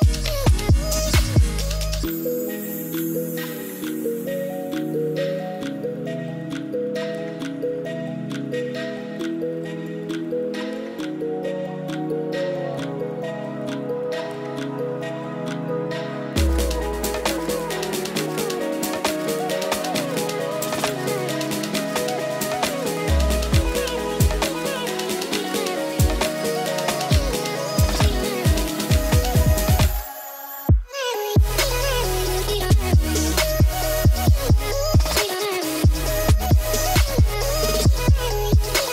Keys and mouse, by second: 1.5-2.6 drag, 5.2 middle click, 5.7 shift+d, 6.9-7.4 drag, 8.1 g, 8.4-9.0 drag, 9.1 middle drag, 13.1-15.8 drag, 17.2-19.5 drag, 18.3 0, 18.5 0, 20.9-22.7 drag, 24.2 click, 24.6-26.1 drag, 27.1-29.9 drag, 31.4 ctrl+s, 31.9-32.2 drag, 32.7 drag, 35.0 shift+d, 36.1 click, 36.4 click, 36.7 g, 37.0 click, 37.2-37.8 drag, 37.9 g, 38.1 z, 38.3 click.